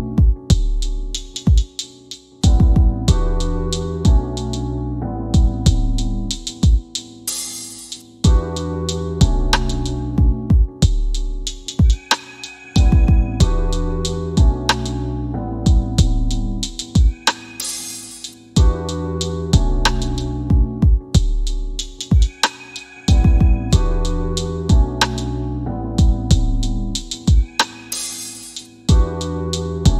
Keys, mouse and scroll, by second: 4.2-5.6 typing, 5.8 Return, 7.1 click, 12.4 middle click, 13.7 click, 13.9 typing, 20.7 click.